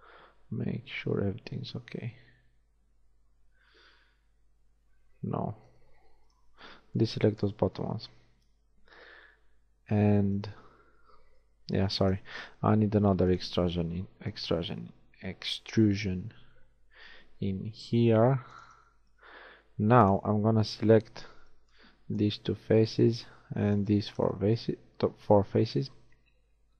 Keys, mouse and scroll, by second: 0.6 z, 3.2 z, 5.0 z, 6.4 b, 9.4 a, 11.9 ctrl+Tab, 14.0 b, 17.5 e, 19.1 ctrl+Tab, 20.4 a, 21.5 b, 22.9 b, 24.4 middle click, 26.3 middle click, 26.4 KP_3.